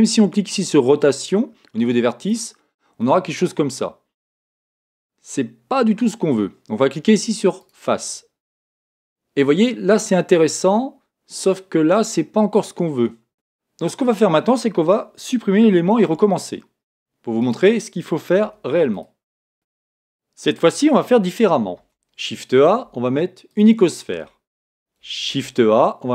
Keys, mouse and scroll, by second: 2.3 click, 3.0-5.0 middle drag, 7.6 click, 9.1-10.4 middle drag, 13.3 click, 16.0 x, 17.5-19.4 right drag, 18.4 x, 21.7 shift+a, 25.2 shift+a.